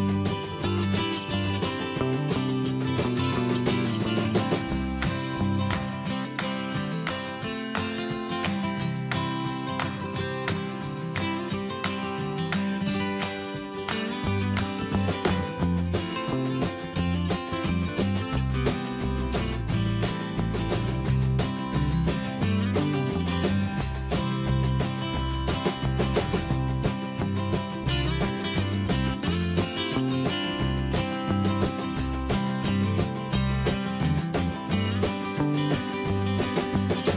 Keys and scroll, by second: 8.4 ctrl+space, 25.2 Up, 36.9 Down.